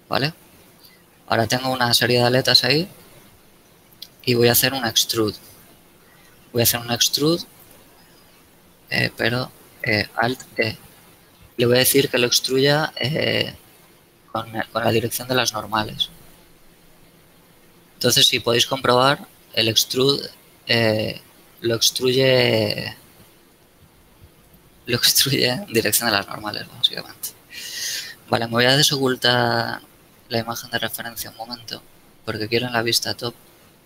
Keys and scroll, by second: 9.2 ctrl+z, 10.7 alt+e, 28.8 n.